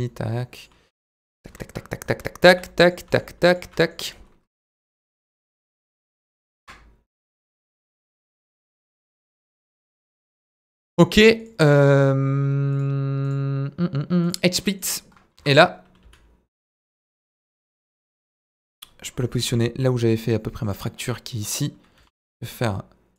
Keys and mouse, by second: 0.6 click, 0.9 g, 1.2 click, 1.6 KP_Decimal, 2.5 s, 2.8 click, 3.1 s, 3.5 click, 3.6 Tab, 3.8 middle click, 5.9 click, 6.6 ctrl+b, 8.1 click, 8.3 Tab, 8.4 middle click, 8.8 right click, 9.3-9.9 middle drag, 11.4 click, 12.7 drag, 14.6 middle drag, 15.4 KP_1, 16.0 s, 16.7 click, 16.9 middle drag, 17.3 ctrl+a, 18.3 KP_1, 19.4 g, 20.6 click, 21.0 middle click, 22.0 g, 22.0 middle click, 22.4 click.